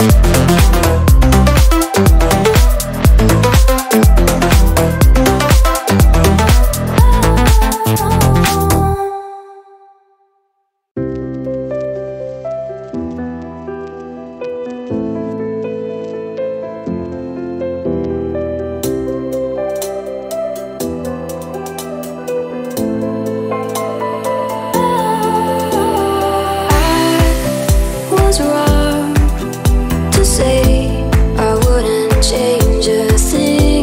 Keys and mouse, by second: 6.1-9.2 drag, 11.8-18.9 middle drag, 18.9 click, 19.7 ctrl+a, 24.5-27.2 drag, 28.0 click, 31.9 click.